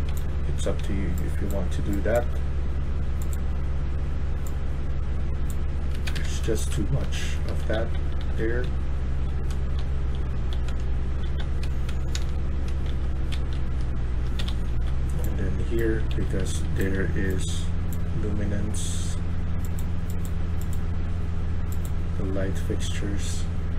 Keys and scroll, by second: 0.0-0.7 typing, 1.8-2.6 typing, 5.8 Escape, 6.0 Escape, 6.1-10.7 typing, 11.8-17.2 typing.